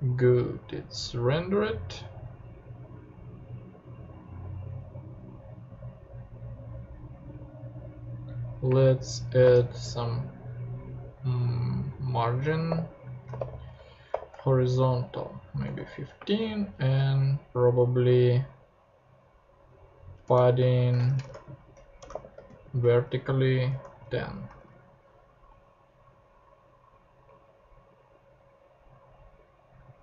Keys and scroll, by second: 8.7-10.1 typing, 12.7-17.5 typing, 20.2 Return, 21.0-24.3 typing, 24.5 super+0, 24.6 super+Tab.